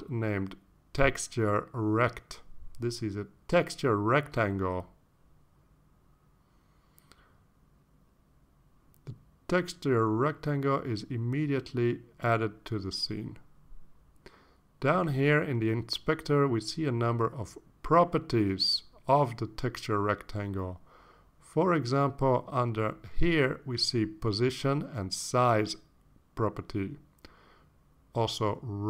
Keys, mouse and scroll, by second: 1.3 click, 4.0-6.7 typing, 10.2 click, 11.7 click, 13.9 click, 14.9 click, 15.5 click, 24.2-25.0 scroll down 4, 26.1 click.